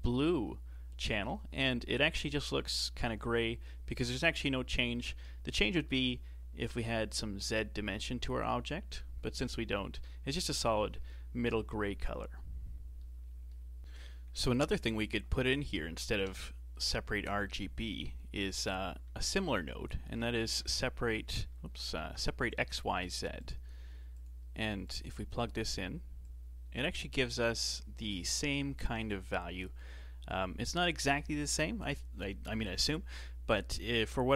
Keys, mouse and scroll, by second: 4.9-8.0 middle drag, 10.1-13.8 middle drag, 15.1 click, 16.2 KP_7, 18.6 x, 19.1 shift+a, 22.0 BackSpace, 24.9-26.3 drag.